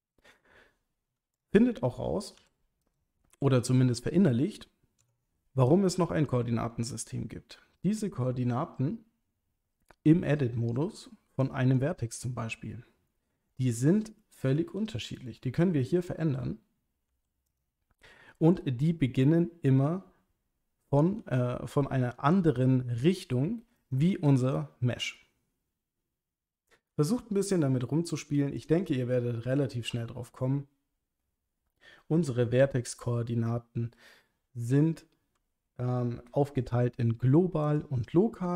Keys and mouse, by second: 1.3 click, 2.4 g, 2.8 click, 5.0 Tab, 5.7 click, 11.5 click, 14.6 g, 15.1 click, 17.1 g, 17.5 click, 21.2 g, 23.0 click, 23.8 click, 24.1 g, 24.4 click, 26.9 g, 28.6 click, 37.6 click.